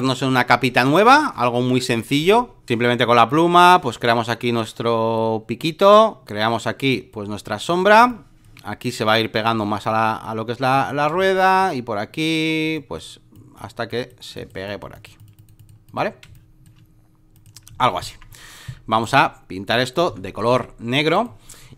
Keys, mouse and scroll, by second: 0.0-8.0 drag, 8.0 space, 8.1 click, 8.9-11.1 drag, 11.1 space, 11.1 click, 12.7-16.2 drag, 16.2 space, 16.3 click, 17.3 click, 18.9 right click, 19.7 click, 20.0 Return, 21.1 click.